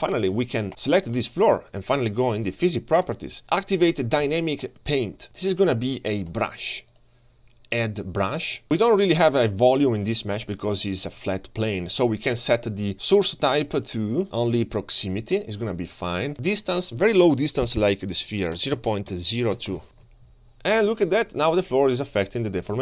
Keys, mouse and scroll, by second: 0.7 click, 0.9 click, 3.0 click, 4.6 click, 6.3-7.1 drag, 8.4 click, 9.5-10.6 scroll down 7, 13.7-16.0 drag, 16.4-19.8 drag, 20.1-22.8 drag.